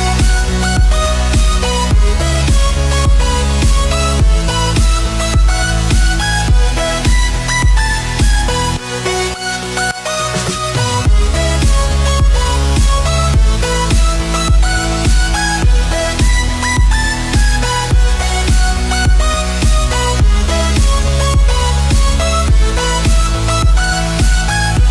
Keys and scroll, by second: 4.7 space, 9.4 space, 12.0 space, 17.6 z, 19.3 z, 20.8 space, 21.6 space, 22.4 space.